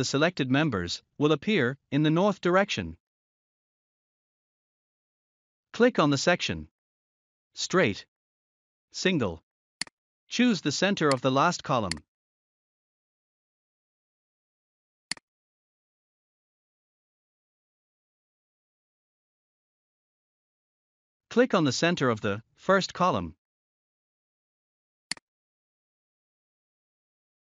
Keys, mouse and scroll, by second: 1.5 click, 2.7-3.8 scroll up 1, 9.8 click, 12.5-12.8 scroll up 2, 15.0 click, 16.9 scroll down 1, 23.1-23.7 scroll up 2, 25.0 click, 26.1 scroll down 1.